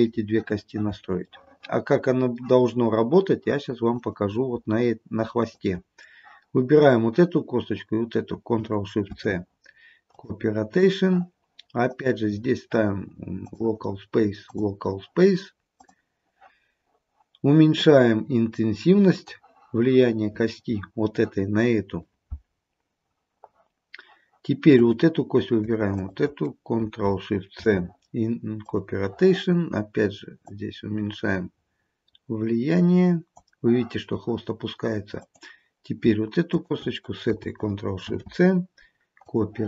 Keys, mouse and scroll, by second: 0.6-1.0 scroll down 2, 1.4 shift+middle click, 2.1 shift+middle click, 4.1 click, 5.5 shift+click, 9.2 ctrl+shift+c, 12.0 click, 14.6 click, 17.9 click, 24.9 click, 26.0 shift+click, 27.7 ctrl+shift+c, 30.5 click, 35.3 click, 36.6 shift+click, 38.2 ctrl+shift+c.